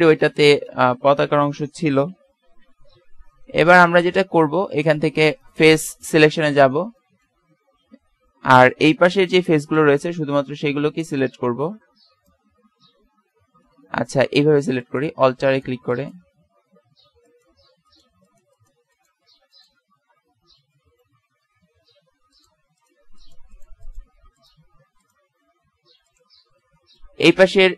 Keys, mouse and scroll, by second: 0.4 BackSpace, 5.4 click, 6.4-9.2 middle drag, 7.4 z, 9.4 b, 22.7-24.1 right drag, 26.7 middle click.